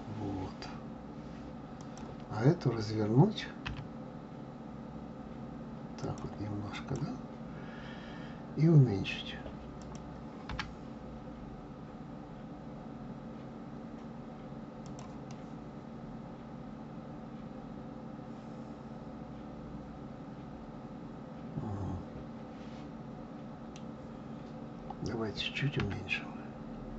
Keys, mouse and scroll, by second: 3.6 r, 6.7 click, 9.7 click, 10.5 g, 15.3-18.3 middle drag, 25.8 s.